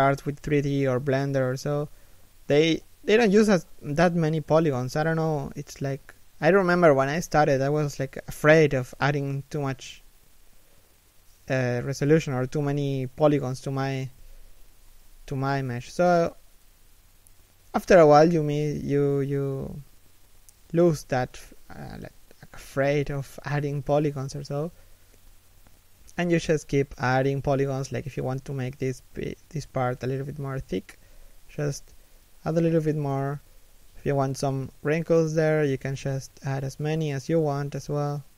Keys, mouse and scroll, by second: 1.7 alt+right click, 2.0 g, 2.9 alt+right click, 3.2 g, 4.0 s, 4.9 alt+right click, 5.1 s, 5.8 g, 7.3 s, 10.1-14.1 typing, 10.7 middle click, 13.0 middle click, 13.8 scroll up 1, 15.5 k, 18.0 a, 18.9 k, 20.6 middle click, 21.5 z, 21.9 middle click, 23.7 z, 24.0 middle click, 24.7 3, 25.0 KP_1, 25.8 scroll down 1, 26.5 scroll up 1, 27.0 scroll down 1, 27.2 scroll up 1, 28.6 k, 30.9 s, 32.5 scroll down 1, 32.6 middle click, 33.7 KP_3, 34.1 KP_1, 35.9 alt+shift+right click, 36.1 g, 37.7 scroll up 1.